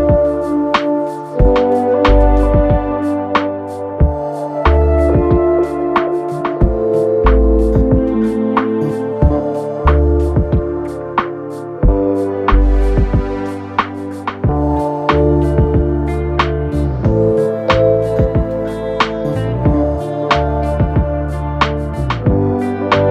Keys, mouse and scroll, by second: 6.1-7.1 typing, 22.1 ctrl+j.